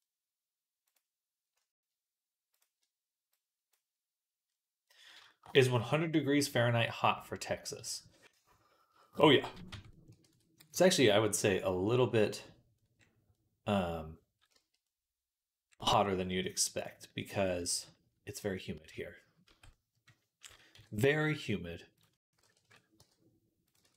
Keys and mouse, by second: 5.0-6.8 shift+middle drag, 7.9-9.2 drag, 7.9-9.2 middle drag, 7.9-9.2 right drag, 9.5 Tab, 9.5 click, 9.5 middle click, 9.5 right click, 10.1 ctrl+s, 14.6 click, 14.6 middle click, 14.6 right click, 14.8 click, 14.8 middle click, 14.8 right click, 17.5-22.1 drag, 17.5-22.1 middle drag, 17.5-22.1 right drag, 19.3 Tab, 20.6 KP_3, 22.1 s, 22.8 g, 23.7 ctrl+z.